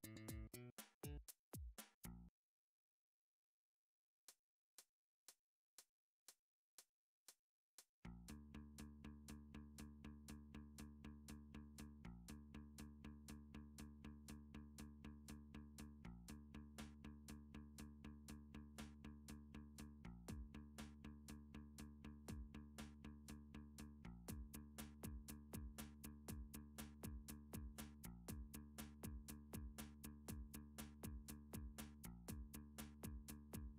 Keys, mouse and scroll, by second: 0.1 click, 0.6 click, 2.6 click, 3.4 click, 3.5 click, 4.4 click, 5.0 click, 7.0 click, 7.7 click, 7.9 click, 9.4 middle click, 9.5 scroll, 10.1-10.7 scroll down 5, 11.4-11.7 scroll down 2, 11.9 scroll, 12.0 shift+middle click, 12.4 3, 13.1 click, 14.4 shift+middle click, 14.6 scroll down 2, 15.8 middle click, 17.7 middle click, 18.0 Tab, 18.5 Tab, 19.2 click, 19.4 Tab, 20.5 alt+click, 21.4 e, 23.2 click, 23.8 s, 27.9 click, 28.3 Tab, 30.2-31.3 drag, 32.0 middle click, 32.6 3, 33.1 click, 33.4-33.7 scroll.